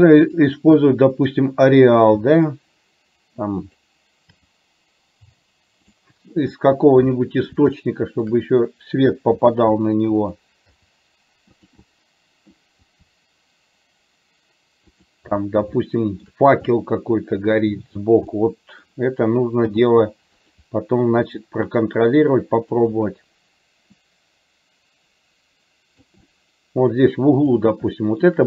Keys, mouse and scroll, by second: 0.4-1.5 drag, 2.3 r, 4.4 g, 6.7-7.7 middle drag, 7.9 shift+middle click, 9.4 r, 10.8 g, 11.9 middle click, 12.9 g, 15.9 shift+middle click, 16.8 middle click, 18.4 middle click, 19.8 g, 21.2 r, 24.2-26.2 drag, 26.4-27.4 middle drag, 28.0 shift+middle click.